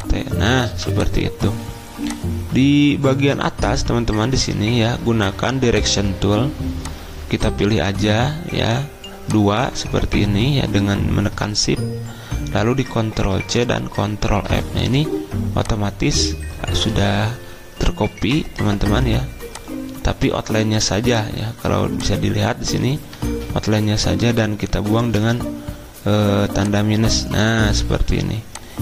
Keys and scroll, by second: 0.6 v, 4.4 a, 13.3 ctrl+c, 14.3 ctrl+f, 17.0 ctrl+z, 23.3 ctrl+z, 25.1 -.